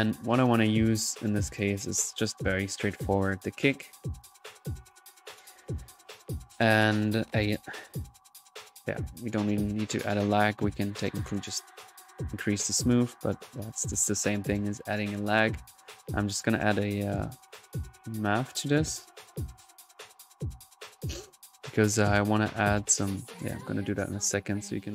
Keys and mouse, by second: 2.7-3.7 drag, 4.0-4.4 drag, 4.7 click, 5.2 middle click, 5.5-6.0 drag, 7.0 right click, 8.3-9.0 typing, 8.9-9.2 drag, 9.4-13.8 drag, 13.9-15.0 drag, 16.6 right click, 17.4 click, 18.7 right click, 19.7-20.5 typing, 20.0 click, 20.3-22.2 drag, 22.3-23.5 drag, 24.1 right click.